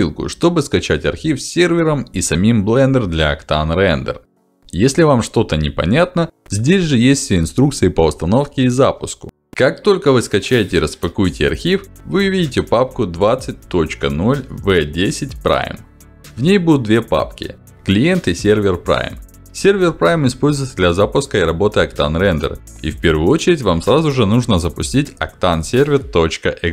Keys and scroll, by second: 5.3 ctrl+alt+d, 17.9 ctrl+alt+d.